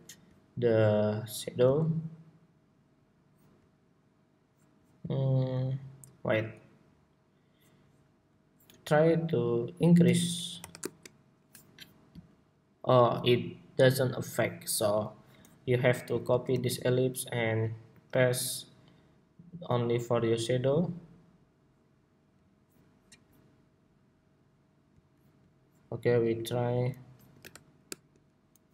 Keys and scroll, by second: 16.2 super+g, 16.2 super+c, 17.6 super+v.